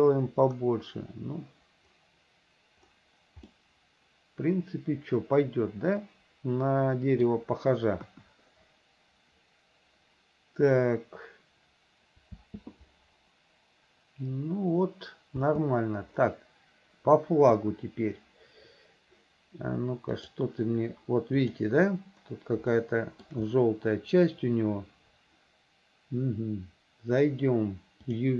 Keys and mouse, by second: 3.6-7.5 middle drag, 8.2 KP_1, 12.5 space, 15.6 space, 17.6 KP_1, 20.4 click, 21.6 click, 22.9 shift+middle click.